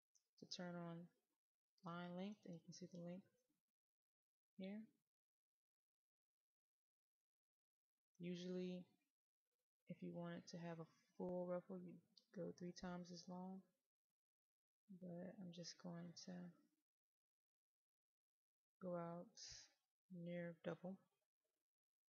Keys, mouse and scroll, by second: 2.8-4.7 scroll down 1, 5.1-6.2 scroll up 1, 6.2 middle click, 10.2-22.0 drag.